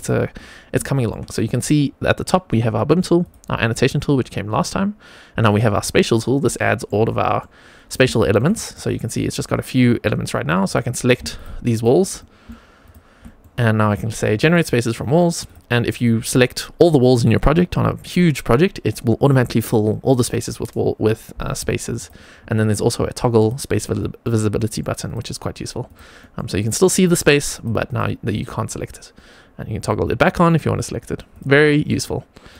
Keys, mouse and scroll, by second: 0.8 shift+middle click, 3.1 click, 5.6 click, 6.1 scroll down 2, 6.5 shift+middle click, 7.0 middle click, 7.7 scroll up 2, 8.0 shift+middle click, 8.4 middle click, 10.6 drag, 11.6 click, 12.0-12.4 middle drag, 12.8-13.1 shift+drag, 13.1 middle click, 14.2 click, 14.9 middle click, 15.4 click, 15.8 middle click, 21.8 click, 23.3 click, 23.8 middle drag, 24.4 middle click, 25.0 click, 26.1 middle click, 26.9 middle click, 27.4 click, 28.2 middle click, 29.7 click, 30.1 click, 31.2 click, 31.9 middle click.